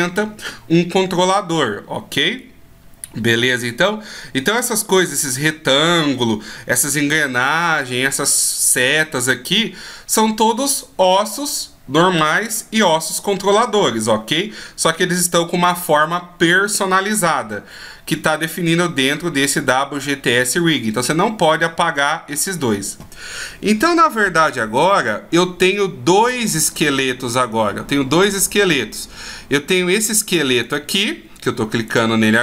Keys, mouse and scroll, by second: 30.2 click, 30.6 right click, 31.9 right click.